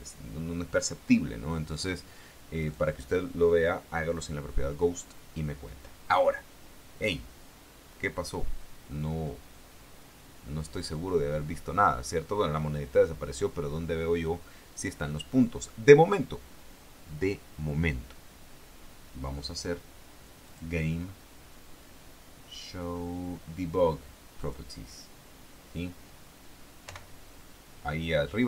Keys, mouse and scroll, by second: 2.8 right click, 20.7 click, 24.6 click, 27.0 p.